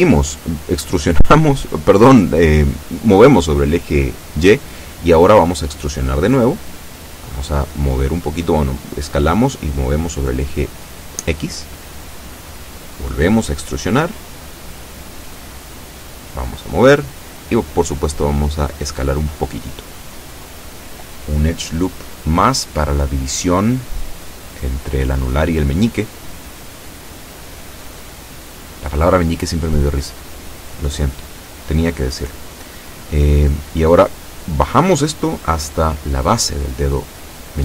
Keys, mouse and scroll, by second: 2.3 shift+click, 3.3 shift+b, 3.8 shift+click, 5.2 e, 6.5 click, 7.3 s, 8.1 click, 9.0-11.6 drag, 12.0 shift+middle click, 13.1 shift+e, 15.3 click, 15.9-17.4 drag, 18.0 s, 19.0 click, 19.7-21.5 shift+middle drag, 22.5 ctrl+r, 22.9 ctrl+click, 26.8 click, 27.7 a, 28.0 b, 28.6 click, 29.6-30.6 drag, 31.2 click, 32.4 a, 32.7 b, 33.2 click, 34.4-36.1 drag, 36.8-37.6 drag.